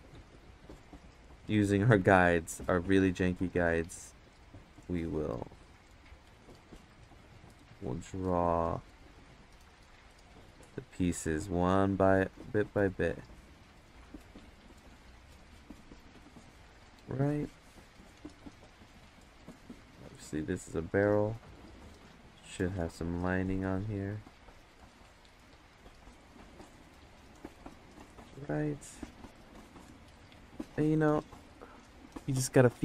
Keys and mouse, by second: 0.4 right click, 2.0 ctrl+z, 2.5 click, 3.4 ctrl+z, 3.7-4.9 drag, 5.6 click, 6.3 ctrl+z, 6.9 click, 8.3-10.2 drag, 11.0 ctrl+z, 11.5 click, 12.1 ctrl+z, 12.5 click, 13.3 ctrl+z, 13.8-15.8 drag, 19.2-20.2 drag, 20.4 ctrl+z, 20.8-22.1 drag, 22.3 ctrl+z, 22.6-24.0 drag, 24.1 ctrl+z, 24.4-26.6 drag, 30.2 click, 30.7 ctrl+z.